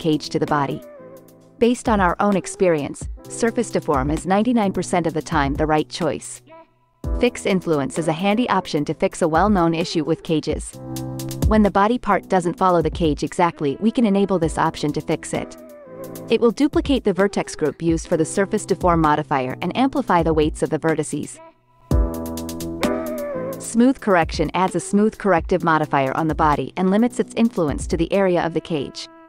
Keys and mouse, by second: 7.3-9.0 drag, 12.0 click, 12.9 space, 16.7 space, 25.3 click.